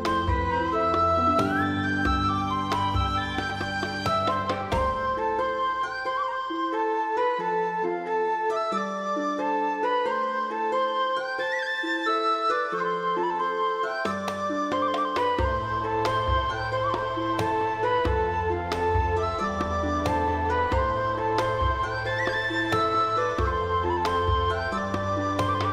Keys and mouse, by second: 0.2 click, 0.4 g, 0.6 click, 0.8 click, 1.1 g, 1.4 click, 1.7 g, 1.8 click, 2.1 click, 2.3 middle click, 2.6 alt+z, 3.0 alt+z, 3.2 click, 3.4 s, 4.1 click, 4.3 click, 4.5 s, 4.5 middle click, 4.9 click, 5.0 middle click, 5.0 g, 6.4 right click, 7.2 middle click, 7.4 g, 9.0 click, 9.2 click, 9.4 g, 9.8 click, 10.0 click, 10.2 g, 10.6 right click, 11.0 alt+z, 11.1 shift+middle click, 11.3 g, 12.4 click, 13.1 alt+middle click, 13.6 shift+middle click, 13.8 shift+middle click, 14.1 shift+middle click, 14.3 shift+middle click, 14.7 alt+z, 14.9 middle click, 15.2 alt+z, 15.4 click, 15.6 alt+z, 16.3 g, 16.4 middle click, 16.9 right click, 17.1 g, 17.2 middle click, 18.7 click, 18.8 shift+click, 19.1 click, 19.2 g, 19.3 middle click, 19.9 click, 20.3 middle click, 21.2 g, 22.3 click, 22.5 click, 23.0 g, 23.3 click, 23.7 click, 24.0 g, 24.8 click, 25.3 click, 25.5 g.